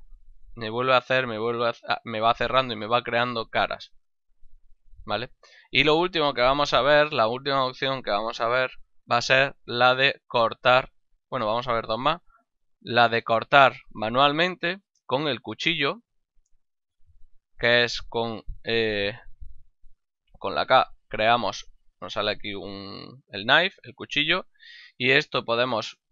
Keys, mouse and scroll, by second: 4.0 middle click, 6.1 ctrl+middle click, 6.5 shift+middle click, 7.3 ctrl+middle click, 7.6 shift+middle click, 10.0 middle click, 19.9 k.